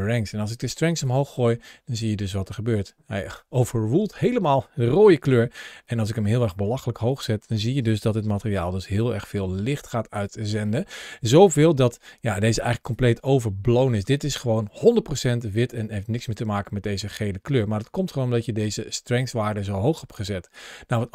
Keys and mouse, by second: 0.8-6.3 drag, 6.8-7.2 shift+middle drag, 8.1 g, 9.9 click, 10.5 middle click, 12.2 ctrl+shift+a.